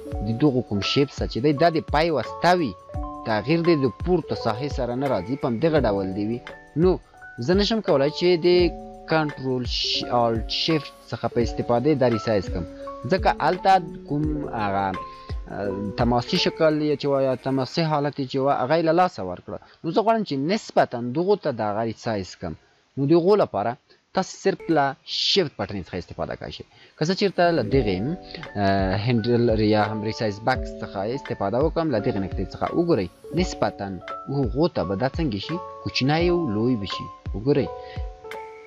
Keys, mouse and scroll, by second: 2.0 click, 5.4 click, 9.0 click, 11.7-12.6 alt+shift+drag, 18.7-20.8 alt+shift+drag, 21.8 ctrl+z, 25.2 ctrl+z, 31.5-35.9 shift+drag.